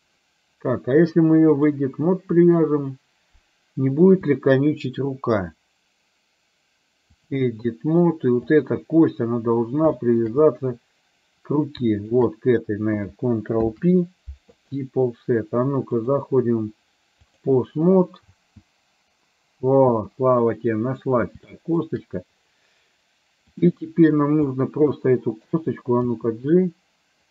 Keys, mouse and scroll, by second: 1.7-2.7 drag, 5.7-7.6 drag, 8.5 click, 10.0 shift+middle click, 12.1 shift+click, 13.7 ctrl+p, 16.3-17.7 drag, 18.4 space, 19.9 space, 20.4 middle click, 21.5 shift+middle click, 23.6 click, 24.7 middle click, 26.0 g.